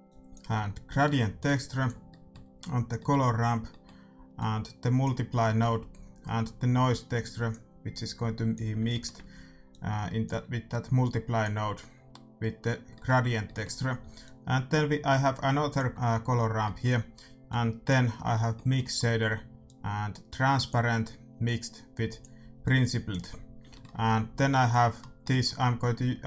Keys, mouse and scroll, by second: 0.0-3.1 drag, 4.3-6.2 drag, 6.4-12.8 drag, 10.5 middle click, 14.2-15.9 drag, 14.2-15.7 middle drag, 16.6-20.6 middle drag, 17.4-19.4 drag, 19.6-26.2 drag, 23.7-26.2 middle drag.